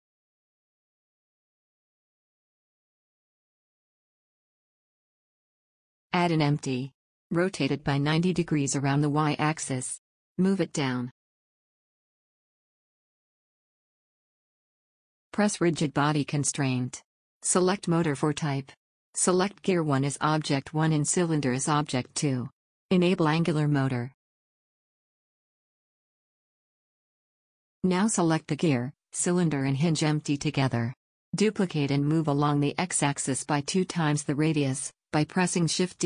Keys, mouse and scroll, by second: 3.2-5.0 drag, 7.1 shift+a, 9.1 s, 10.3 r, 11.9 g, 15.5-24.6 drag, 25.2-27.0 drag, 27.3-28.4 middle drag, 28.4-32.2 drag, 32.4 shift+d.